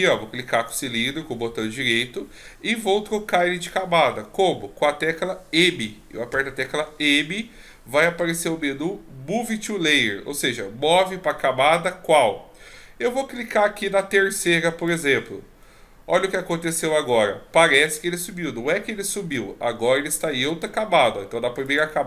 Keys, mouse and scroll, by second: 0.6 right click, 6.3 m, 21.6 click.